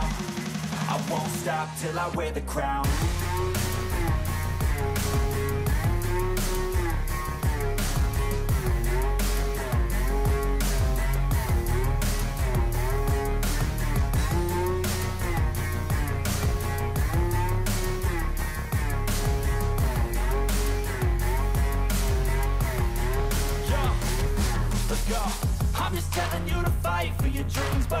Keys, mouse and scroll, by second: 10.5 double click, 11.0 click.